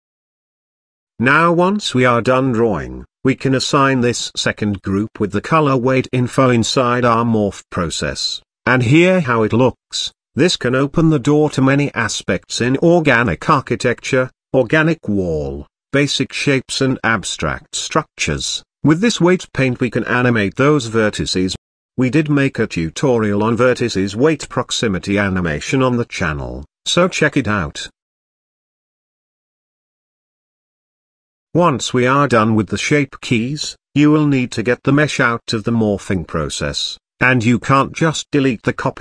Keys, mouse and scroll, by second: 0.5-2.2 drag, 2.2 scroll up 1, 6.5-8.7 drag, 9.2-11.6 middle drag, 15.0-17.5 shift+middle drag, 19.6 click, 22.1-22.7 scroll down 1, 22.7-25.1 shift+middle drag, 30.3-33.4 middle drag, 33.4 click, 34.0 click, 35.9 click, 37.8 x.